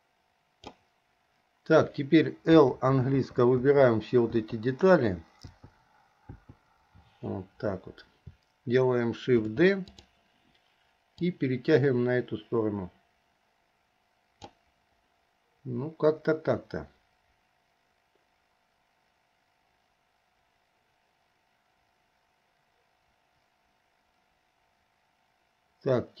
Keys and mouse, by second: 2.8 l, 3.9 l, 4.6 l, 5.7 l, 6.6 click, 9.6 shift+d, 11.3-14.7 drag.